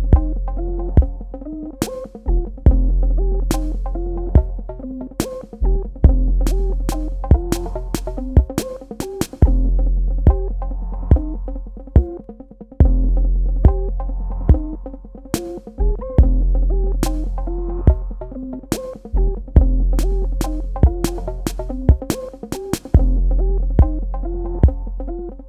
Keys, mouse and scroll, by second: 8.1 alt+click, 12.0 click, 15.1 click, 17.1 click.